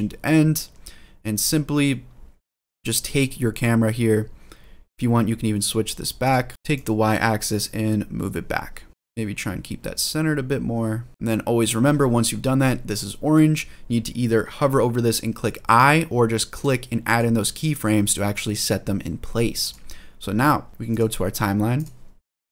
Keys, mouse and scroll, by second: 6.0-9.9 drag, 11.1 click, 16.3 click, 19.4-21.6 drag, 22.4-22.5 drag.